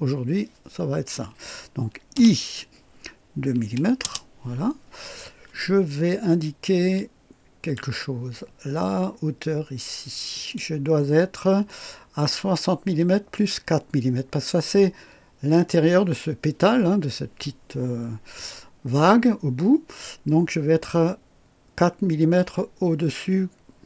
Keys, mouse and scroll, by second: 2.1 i, 3.6-4.0 typing, 4.0 Return, 7.0-7.9 drag, 10.3 click.